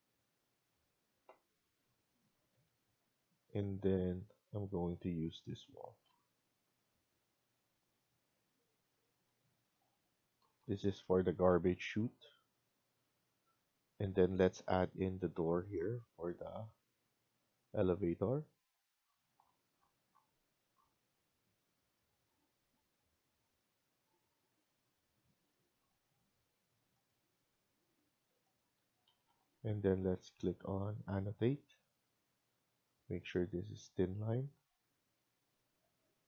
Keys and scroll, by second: 7.3-8.0 typing, 8.9 Escape, 9.2 Escape, 10.3 Down, 10.5 Down, 11.2 Escape, 11.4 Escape, 28.7 Escape, 29.0 Escape.